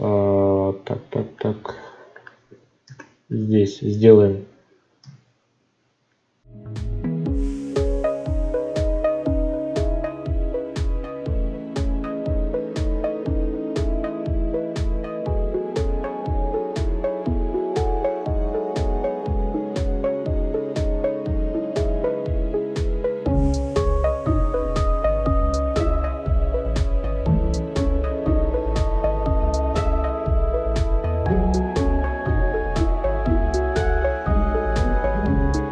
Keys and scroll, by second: 9.0 ctrl+z, 12.8 ctrl+z, 26.4 ctrl+z, 30.3 ctrl+z, 35.1 ctrl+z.